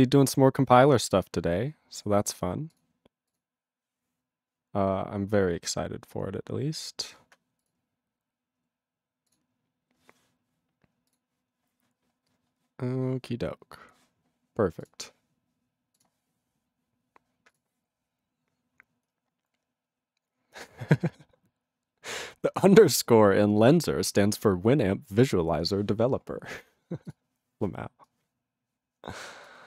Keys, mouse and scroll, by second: 17.5 click.